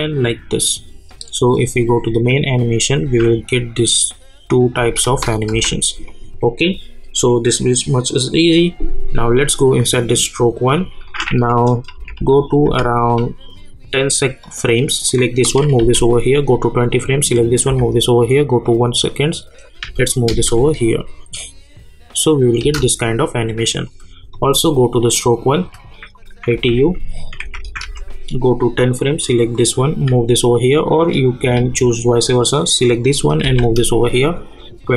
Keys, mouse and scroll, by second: 3.0 space, 6.1 click, 9.3 click, 11.9 =, 12.1 =, 12.6 =, 14.4 click, 15.8 [, 16.8 click, 17.7 [, 18.6 click, 19.8 [, 20.3 space, 22.6 space, 23.1 click, 26.5-28.3 typing, 28.8 click, 32.5 click, 33.4 [, 34.6 click.